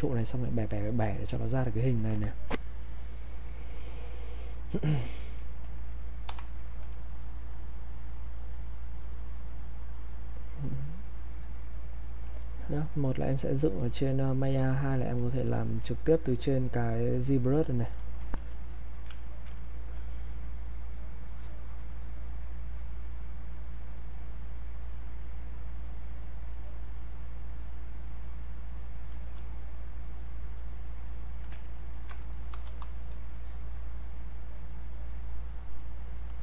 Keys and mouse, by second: 10.7-15.0 drag, 15.0-18.7 drag, 18.7 alt+click, 19.2 ctrl+right click, 19.7-22.7 alt+drag, 24.9 click, 28.2 click, 29.1 alt+click, 31.6 ctrl+right click, 32.3 alt+click, 32.7 r, 33.4-36.3 drag.